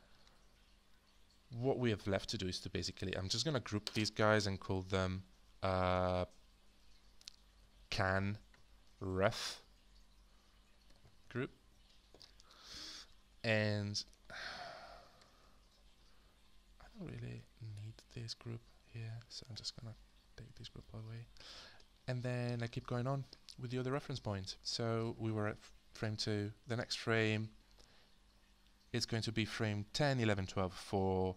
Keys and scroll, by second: 4.5 ctrl+g, 5.9 Return, 7.2-11.9 typing, 15.2 h, 20.1 BackSpace.